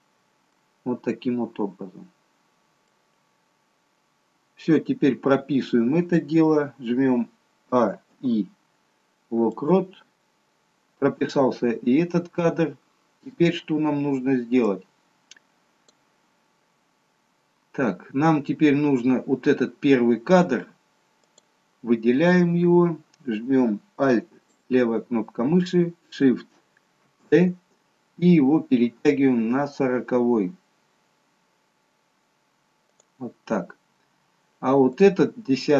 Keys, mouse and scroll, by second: 0.6 middle click, 3.3-4.3 scroll down 3, 4.5-5.3 scroll down 1, 8.5 a, 12.2-13.3 scroll down 2, 13.3-14.7 scroll up 1, 14.7 click, 14.7-15.1 scroll up 2, 16.6-17.1 scroll up 2, 17.5-18.1 scroll down 2, 18.6-19.8 scroll down 2, 21.7 click, 24.8 alt+click, 27.5 shift+d, 35.3 click.